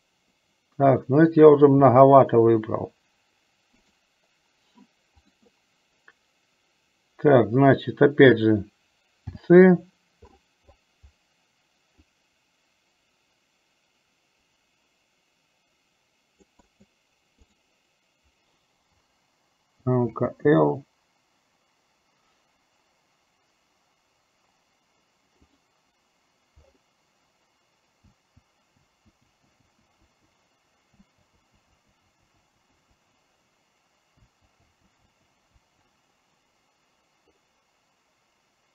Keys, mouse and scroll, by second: 1.9 c, 5.4 click, 9.4 c, 20.2 l, 20.6 l, 25.5 click, 28.4-30.3 typing, 31.6-35.0 typing, 36.0 l.